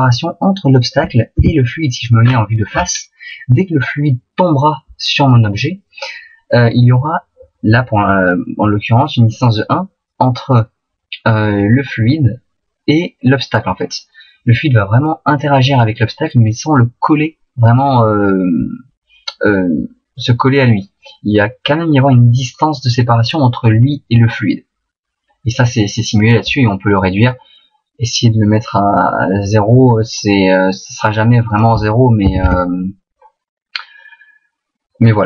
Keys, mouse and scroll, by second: 1.4 KP_1, 2.3-3.3 scroll up 8, 26.5 click, 31.5 click.